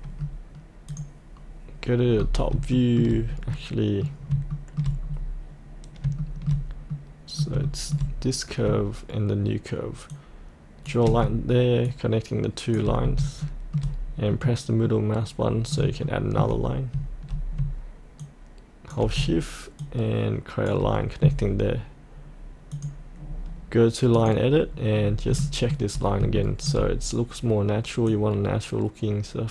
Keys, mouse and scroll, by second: 0.8 click, 2.1-2.5 scroll up 1, 2.7 shift+middle click, 3.5 middle click, 4.5 shift+middle click, 5.0-6.0 scroll down 1, 6.2 shift+middle click, 7.6 shift+middle click, 10.1 shift+click, 11.8 shift+click, 12.9 scroll up 1, 13.4 shift+middle click, 14.3 middle click, 16.0 shift+middle click, 17.3 scroll down 1, 18.2 shift+click, 19.8-22.6 shift+drag, 25.0-25.3 scroll down 1, 25.4 shift+middle click, 26.4 shift+middle click, 28.1-29.5 drag.